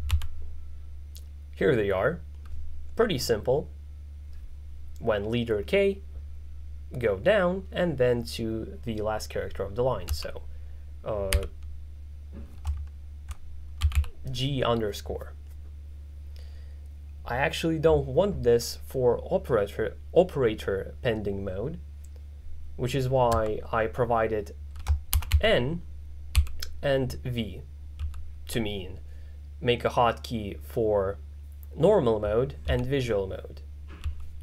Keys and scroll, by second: 0.2 n, 10.1 f, 11.4 g, 13.9 ctrl+v, 14.0 l, 25.0-26.4 typing, 28.1 k, 32.7 j, 34.1 k.